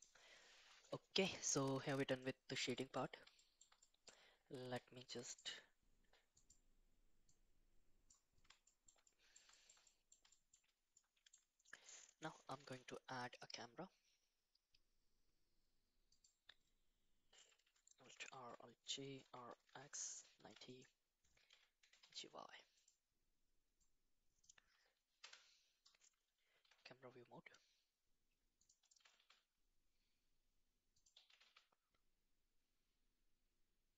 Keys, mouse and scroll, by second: 2.2 middle click, 2.7 shift+middle drag, 3.4 shift+middle drag, 3.8 middle click, 5.3 click, 6.4 click, 7.3 click, 8.7 shift+middle click, 9.0 middle click, 9.5 shift+middle click, 9.8 middle click, 10.3 shift+middle click, 10.9 middle click, 12.6 shift+a, 18.0 alt+r, 18.3 alt+g, 19.2 r, 21.5 f, 21.8 g, 23.9 click, 25.2 KP_0, 27.0 g, 29.2 g, 31.3 g.